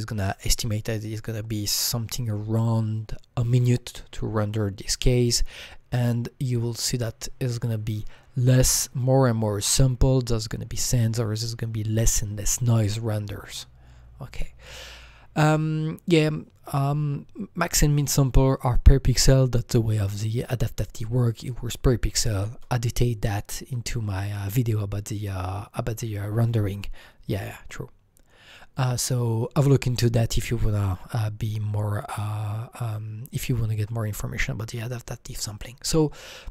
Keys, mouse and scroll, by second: 5.0 click, 5.0-6.4 scroll up 9, 6.9-13.9 drag, 13.8-14.9 scroll down 5, 14.9-15.4 scroll down 2, 16.0-16.4 scroll down 1, 29.3-29.9 scroll down 9.